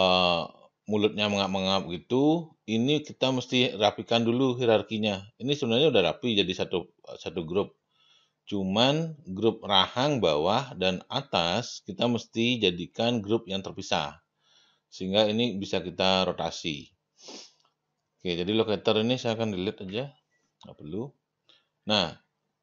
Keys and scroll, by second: 19.8 Delete.